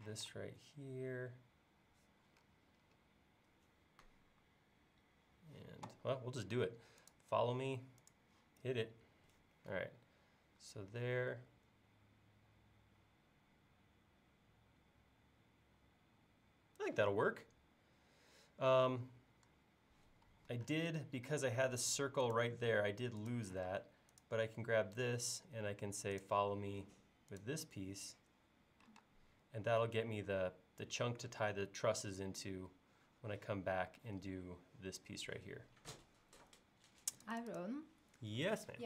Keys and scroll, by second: 0.2 m, 23.7 space, 29.1 space.